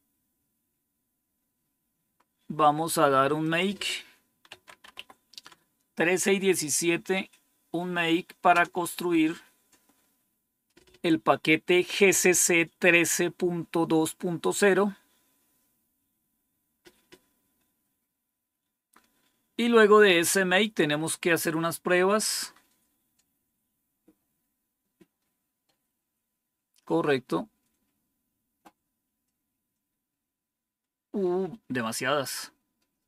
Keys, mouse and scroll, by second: 0.5-2.7 scroll down 1, 2.7-3.3 scroll down 1, 3.3-4.4 drag, 4.2-5.4 typing, 8.4 Return, 18.5-19.0 scroll down 2, 21.6 scroll down 1, 22.4 scroll down 2, 23.0 scroll down 2, 24.6-25.1 scroll down 3, 26.9 scroll down 2, 27.7 scroll down 2, 28.5 scroll down 2, 29.2 scroll down 2, 29.9-30.4 scroll down 3, 31.0 scroll down 2, 31.6 scroll down 2, 32.3 scroll down 2.